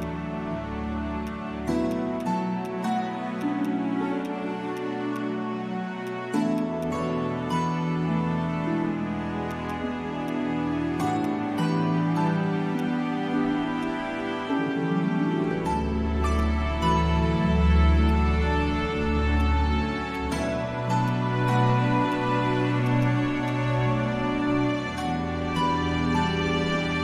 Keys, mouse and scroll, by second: 2.2 shift+click, 3.3 shift+click, 9.4 right click, 22.8 right click.